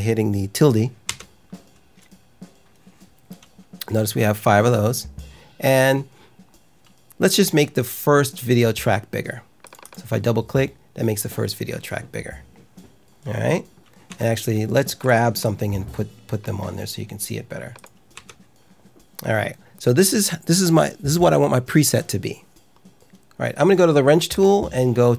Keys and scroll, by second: 1.0 `, 14.0 `, 18.1 `.